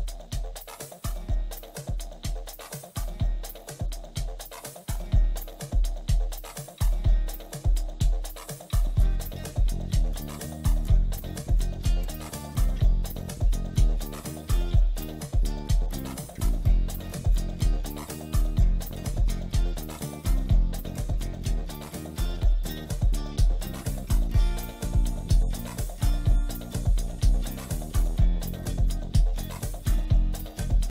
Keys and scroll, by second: 2.3 shift+F2, 3.0 Escape, 6.7 Escape, 7.1 F4, 10.9 F2, 15.6 F4, 18.3 F2, 21.4 ctrl+z, 21.8 F3, 22.7 Escape, 24.9 shift+F2, 26.0 F9, 30.8 Escape.